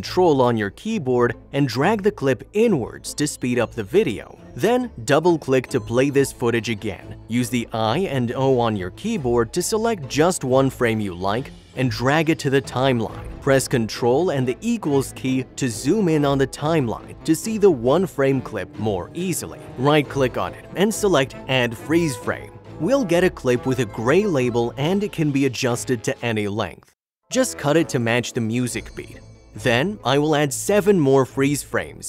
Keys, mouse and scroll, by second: 1.5 ctrl+click, 5.5 ctrl+click, 5.7 double click, 6.7 space, 6.9 click, 7.4 click, 11.2 click, 24.1 click, 25.2 click, 26.5 click, 27.4 click, 28.6 click, 29.3 Delete, 29.6 double click, 29.8 click, 29.8 click, 30.1 click, 30.1 o, 30.4 click, 30.6 click, 30.7 Delete, 30.8 double click, 30.9 space, 31.0 click, 31.6 right click, 31.7 click, 32.0 click, 32.0 Delete.